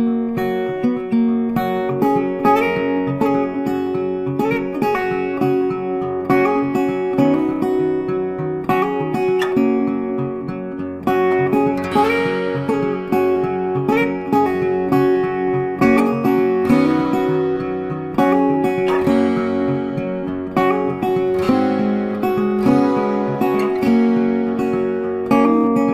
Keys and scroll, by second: 3.2 ctrl+t, 24.4 ctrl+t.